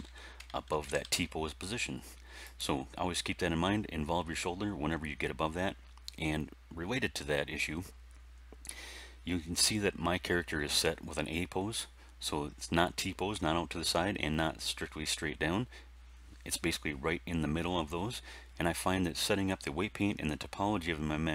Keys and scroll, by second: 0.6 alt+r, 0.8 alt+g, 1.0 alt+s.